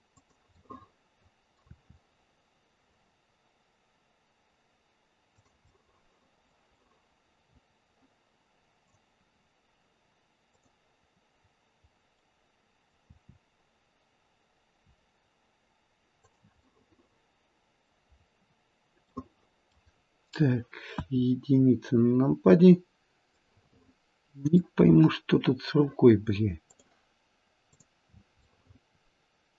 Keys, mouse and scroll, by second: 0.5 middle click, 0.9 middle click, 1.6 r, 5.6 middle click, 5.9 click, 6.8 middle click, 8.8 click, 10.5 click, 12.1 middle click, 12.3 middle click, 13.1 r, 16.6 middle click, 17.5 middle click, 18.1-19.2 scroll up 1, 19.2 middle click, 19.2-20.0 scroll up 2, 20.9 KP_1, 21.6-22.6 scroll down 6, 22.6-23.4 scroll up 1, 23.4 middle click, 23.4 scroll up 4, 26.6 click, 27.7 click, 28.4 middle click, 29.0 middle click, 29.2 middle click.